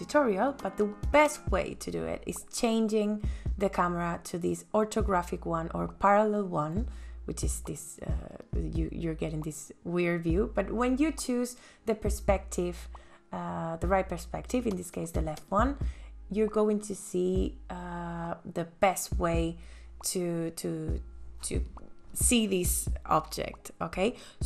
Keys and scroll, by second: 20.5 m.